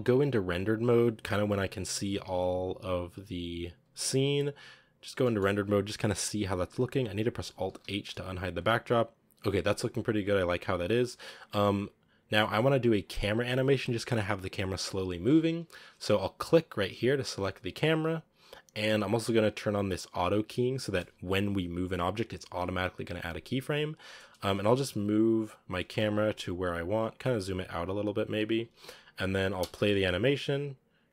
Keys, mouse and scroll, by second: 2.9-3.6 scroll up 3, 3.6-3.9 scroll up 1, 4.1 z, 5.1-7.5 shift+middle drag, 7.5 alt+h, 8.3 a, 11.4 click, 12.2 z, 12.9-16.5 drag, 16.5 right click, 17.1 scroll down 2, 17.4 g, 17.9-21.5 scroll up 2, 24.2-24.5 scroll down 2, 24.5 g, 25.6 g, 27.7 g, 29.4 space.